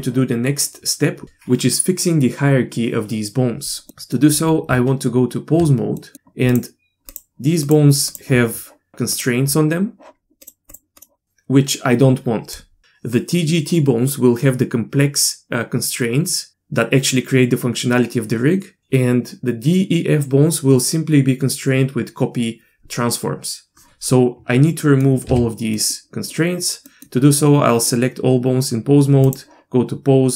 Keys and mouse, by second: 3.9 middle click, 4.7 Tab, 6.0 middle click, 7.1 click, 7.8 click, 9.1 click, 10.7 click, 11.0 drag, 24.8 middle click, 25.3 a, 25.7 middle click, 26.9 middle click, 29.4-30.3 drag.